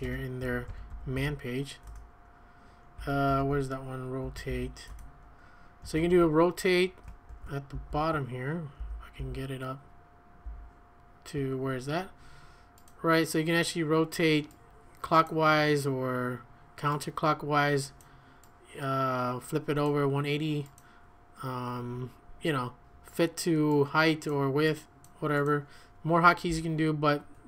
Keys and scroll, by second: 0.0-1.7 typing, 1.9 Return, 3.0-7.7 typing, 8.8 ctrl+u, 9.2 ctrl+u, 10.4 ctrl+u, 26.5-27.4 typing.